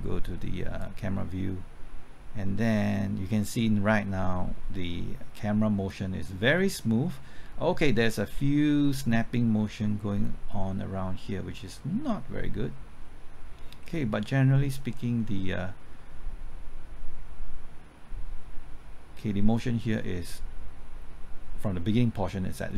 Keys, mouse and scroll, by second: 0.8-22.7 drag.